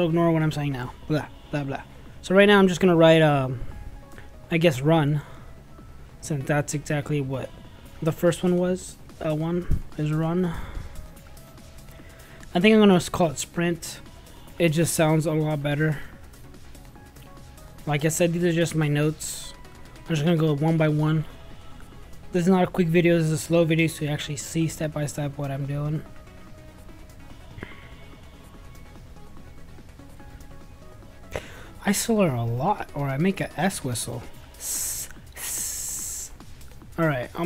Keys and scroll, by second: 2.1 ctrl+a, 4.5-9.5 typing, 11.3 [, 11.5 ], 11.6 =, 11.9 BackSpace, 13.1 BackSpace, 17.0-18.6 typing, 20.4-22.7 typing, 24.8 n, 25.9 t, 26.5 r, 26.6 Caps_Lock, 28.9-29.7 typing.